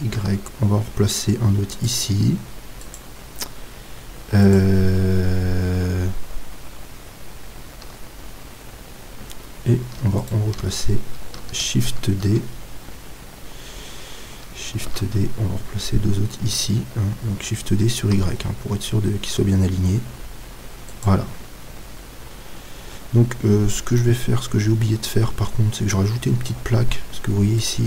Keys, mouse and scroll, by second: 1.9-3.2 drag, 7.9 z, 8.6-10.2 middle drag, 10.2-12.0 right drag, 12.0-14.8 middle drag, 14.8 shift+d, 21.0-22.9 drag, 21.6-25.8 middle drag.